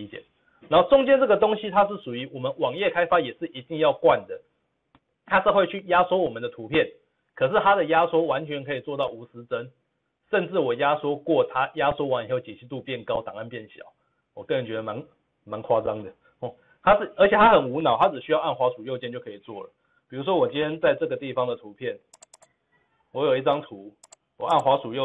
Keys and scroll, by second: 20.7 ctrl+v, 20.8 ctrl+z, 21.1 ctrl+z.